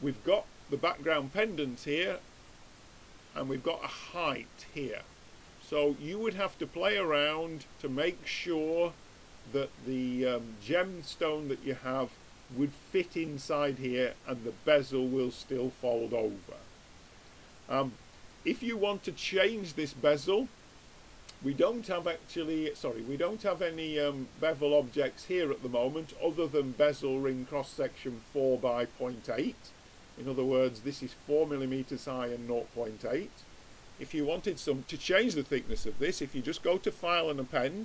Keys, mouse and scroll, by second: 5.4-6.8 middle drag, 7.1 middle click, 15.7 middle click, 17.1 middle click, 19.5 click, 21.8-25.6 drag, 36.6-37.8 drag.